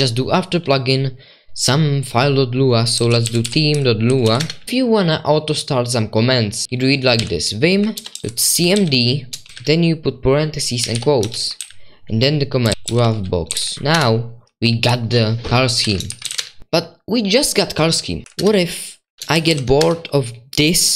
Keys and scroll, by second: 3.7-5.1 typing, 8.6-16.7 typing, 19.8-20.9 typing.